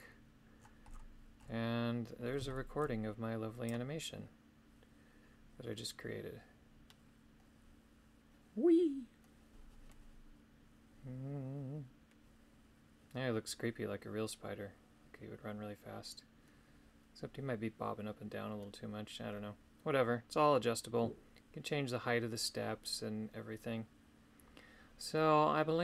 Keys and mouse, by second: 2.5 shift+click, 3.7-25.8 drag.